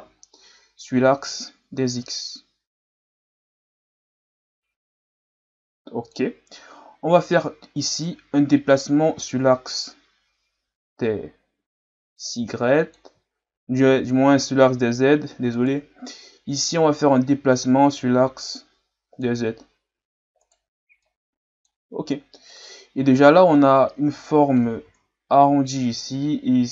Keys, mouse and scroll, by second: 1.3-4.4 drag, 6.9 scroll down 3, 8.0 right click, 8.8-11.9 drag, 13.4-13.8 shift+scroll up 3, 15.5 right click, 16.7-19.7 drag, 20.4 right click, 21.0-22.5 drag, 22.5 right click, 23.4-24.8 drag, 24.8 ctrl+z.